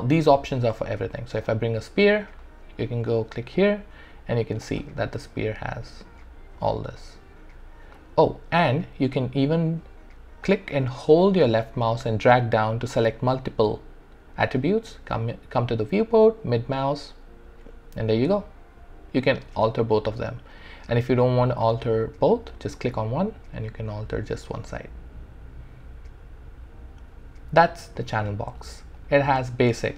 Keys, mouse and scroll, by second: 0.8 shift+right click, 1.5 alt+click, 5.5 middle click, 7.3 click, 10.7-12.0 drag, 16.5-22.3 middle drag, 22.3 click, 23.2-28.4 middle drag, 28.4 click.